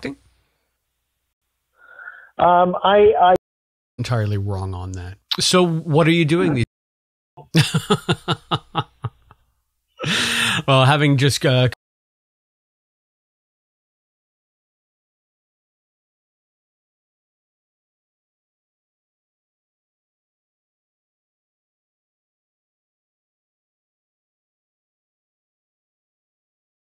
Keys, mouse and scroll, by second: 0.6 click, 1.3 space, 1.7-3.2 drag, 3.3 space, 3.8 click, 3.8 space, 6.4 click, 6.5 space, 7.2 click, 7.3 space, 11.6 space, 11.7 click, 12.8 click, 15.1 click, 15.8 click, 17.3-20.0 drag, 21.0-22.2 drag, 22.6 click, 23.5-26.2 drag.